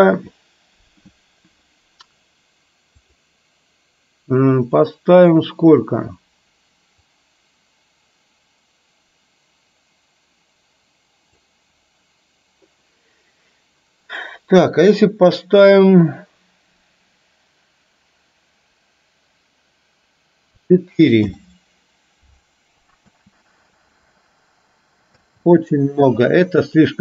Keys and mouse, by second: 3.0-21.4 drag, 23.0 space, 25.2 space, 26.8-27.0 drag.